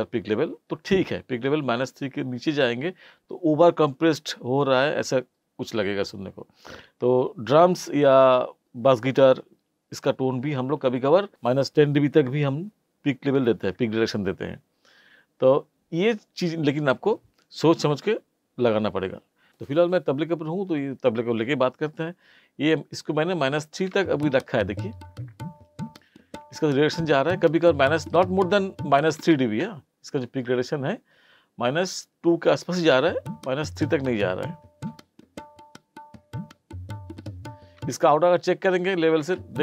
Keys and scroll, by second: 23.9 space, 29.2 space, 32.9 space, 37.8 space, 39.2 space.